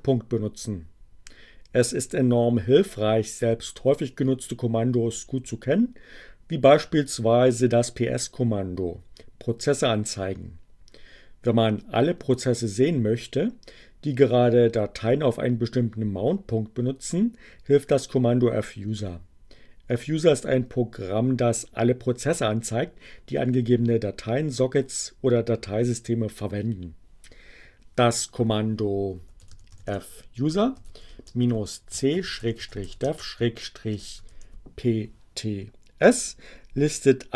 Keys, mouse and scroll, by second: 27.0 f, 29.3-34.4 typing, 34.9 Return.